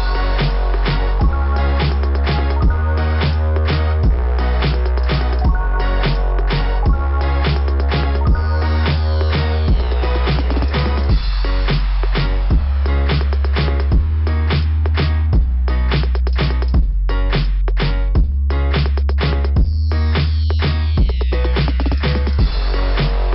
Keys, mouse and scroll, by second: 1.7-2.6 typing, 2.6 scroll down 2, 13.2 click, 13.5 click.